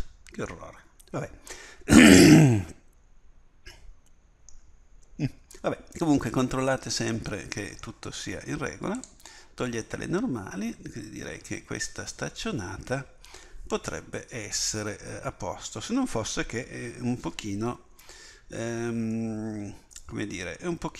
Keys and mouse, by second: 0.2 middle click, 3.1 middle click, 5.7 middle click, 9.0-11.9 drag, 17.9 KP_1.